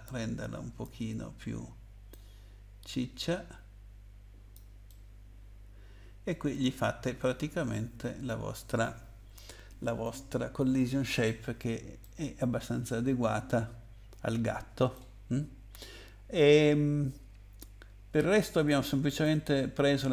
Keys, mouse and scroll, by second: 2.1 click, 4.9 middle click, 12.0 middle click, 19.1 click.